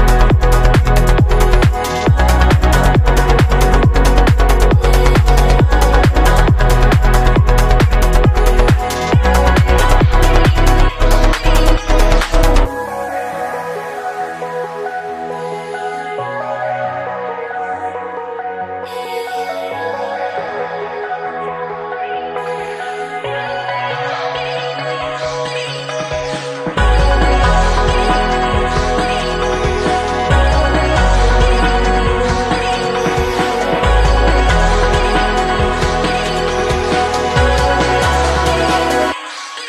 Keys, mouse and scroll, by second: 5.5 a, 7.6-11.7 drag, 8.6 t, 9.1 n, 9.6 n, 11.7-12.0 middle drag, 12.0-14.7 drag, 13.6 n, 14.7-15.4 middle drag, 16.5-18.6 drag, 18.6-19.9 middle drag, 19.9 click, 20.1 middle click, 20.6-26.6 drag, 26.6-28.4 middle drag, 28.4-29.7 drag, 29.7-30.6 middle drag, 30.6-35.5 drag, 35.5-39.6 middle drag.